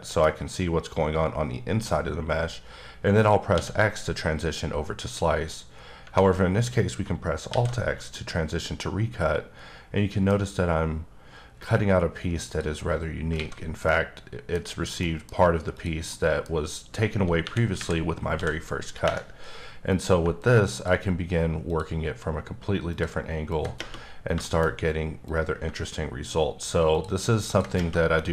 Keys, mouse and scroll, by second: 3.5 x, 7.5 alt+x, 8.1 middle click, 12.4 click, 13.3 alt+a, 13.9 middle click, 15.0 middle click, 15.8 click, 16.1 middle click, 17.4 KP_1, 17.8 KP_3, 18.3 d, 19.9 click, 23.0 ctrl+double click, 23.5 ctrl+click, 24.1-24.7 scroll up 4, 24.4 shift+middle click, 25.3 click, 27.4 double click, 28.2 middle click.